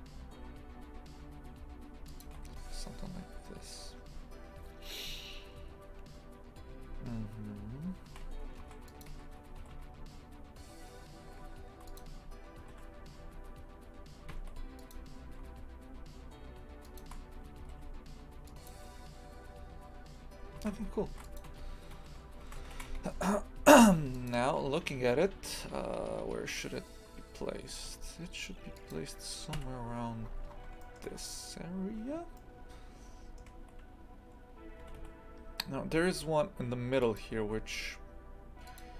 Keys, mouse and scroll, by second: 2.6 KP_2, 8.2 a, 8.6 ctrl+r, 9.6 g, 12.7 g, 15.3 s, 20.6 shift+f, 21.5 Tab, 22.1 z, 22.8 shift+f, 27.8 g, 29.6 KP_3, 30.2-30.6 scroll down 12, 30.8 shift+middle click, 31.1-32.4 scroll up 1, 32.4-34.9 shift+middle drag, 34.9 g, 37.3 g.